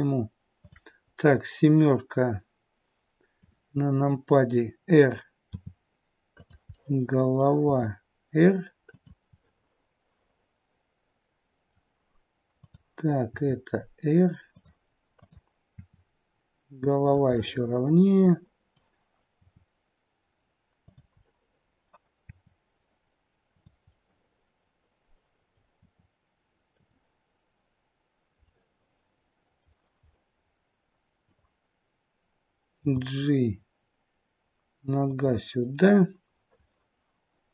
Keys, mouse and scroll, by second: 0.6 click, 3.4 KP_7, 5.5 r, 6.7 middle click, 7.7 r, 9.3 middle click, 12.5 click, 13.3 r, 15.2 click, 15.7 r, 17.3 middle click, 19.4 r, 21.2 middle click, 22.2 r, 23.9 middle click, 25.7 r, 28.4 middle click, 30.1 middle click, 31.2 click, 32.8 g, 35.7 middle click.